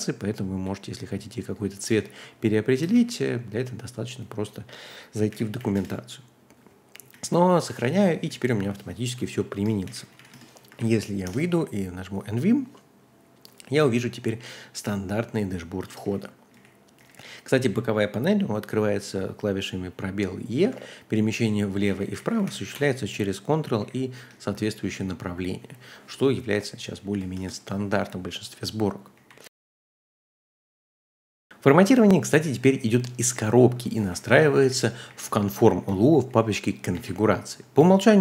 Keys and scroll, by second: 0.0-1.2 typing, 1.7 ctrl+u, 1.8 ctrl+u, 2.9 w, 3.7 Escape, 5.3 shift+;, 5.6 w, 5.7 Return, 7.1 j, 7.3 j, 7.5 j, 7.9 ctrl+d, 8.1 ctrl+d, 8.4 ctrl+d, 9.6-10.7 typing, 10.7 Up, 11.2 Return, 15.7-18.3 typing, 20.7 ctrl+l, 21.1 ctrl+h, 21.4 ctrl+l, 21.6 ctrl+h, 21.9 ctrl+l, 22.0 ctrl+h, 22.2 ctrl+l, 22.4 ctrl+h, 23.7 ctrl+l, 24.1 ctrl+h, 24.5-27.8 typing, 28.9-29.6 typing, 34.4-36.7 typing, 36.9 ctrl+l.